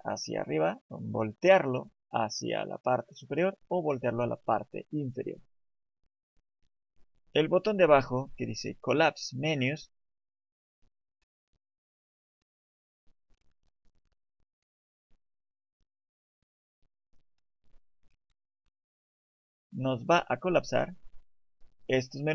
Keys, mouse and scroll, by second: 7.0 right click, 11.1 right click, 19.1 right click, 19.7 right click, 21.5 click.